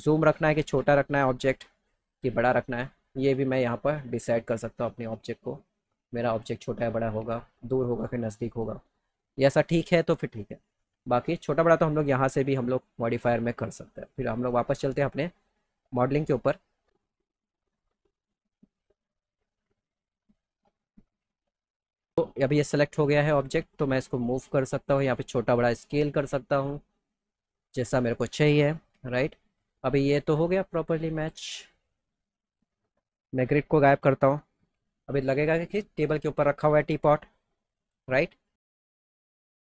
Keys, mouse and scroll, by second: 4.5-7.0 drag, 7.2 ctrl+z, 11.4 click, 12.3 click, 14.4 click, 15.6 click, 17.4 click, 18.7 click, 19.2 click, 19.9 click, 21.1 click, 21.6 click, 23.9 click, 25.4 click, 26.7-28.1 drag, 29.6 click, 31.1 click, 31.7 click, 32.4 click, 37.3 click, 39.0 click, 39.3 click.